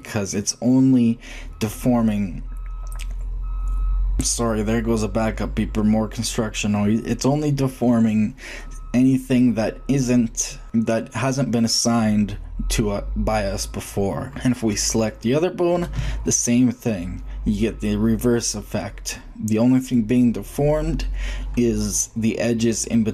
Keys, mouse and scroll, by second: 14.5-14.9 drag, 14.9-15.7 middle drag, 15.7-18.0 drag, 15.7 g.